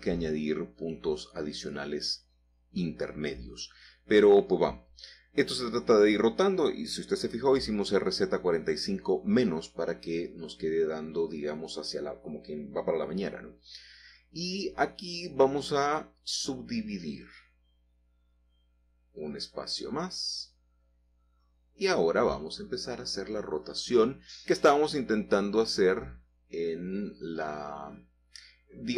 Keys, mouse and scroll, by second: 0.0 Return, 1.0-2.4 middle drag, 3.0-4.7 typing, 5.2 Return, 6.2-7.9 middle drag, 8.0 g, 9.5 x, 11.1 click, 11.5-13.5 middle drag, 13.6 middle click, 14.1-14.7 scroll up 2, 14.4 Tab, 14.8 shift+middle click, 17.6-18.6 drag, 19.6-20.6 drag, 21.1-22.1 scroll down 1, 23.7-24.8 drag, 25.8 g, 26.2 x, 28.3 Escape.